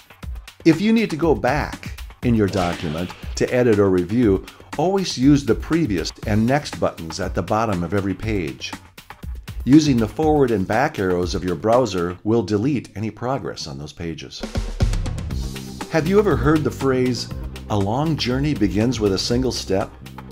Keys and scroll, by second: 0.0-2.8 typing.